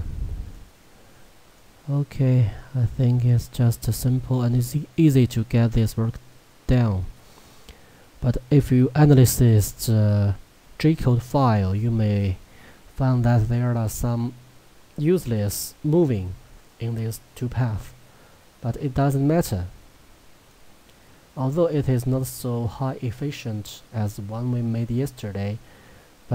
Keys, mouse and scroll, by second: 6.3 shift+middle click, 11.8 middle click, 20.5-26.3 middle drag.